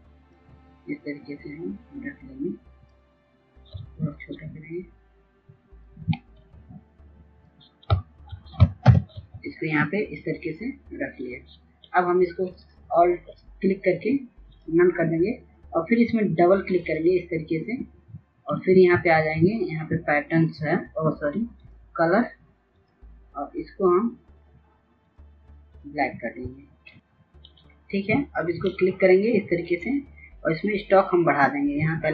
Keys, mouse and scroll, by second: 4.7 shift+click, 8.8 Return, 12.5-32.1 drag.